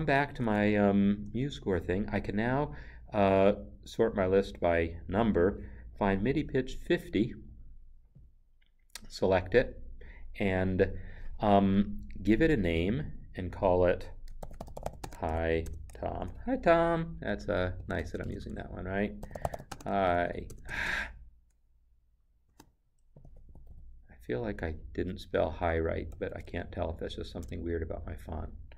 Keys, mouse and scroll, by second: 4.3 click, 8.2 click, 14.4-16.1 typing, 17.8 BackSpace, 19.2-20.5 typing, 22.4 BackSpace, 23.5 o, 26.1 Left.